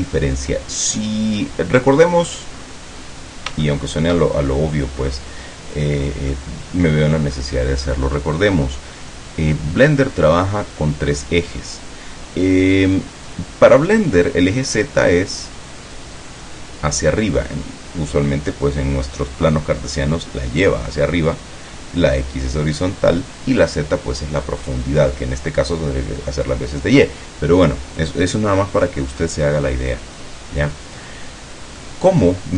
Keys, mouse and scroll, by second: 1.1-2.6 middle drag, 2.7 scroll up 1, 3.8-6.6 shift+middle drag, 28.9-30.9 drag, 31.1 scroll up 1, 31.9-32.5 drag.